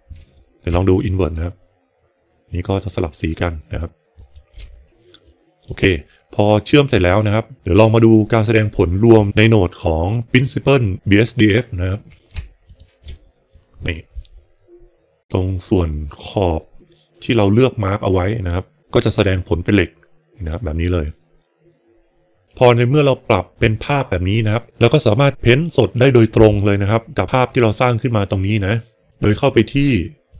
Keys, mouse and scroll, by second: 1.2 ctrl+shift+click, 4.1 ctrl+shift+click, 5.2 middle click, 7.0 middle click, 12.7 ctrl+shift+click.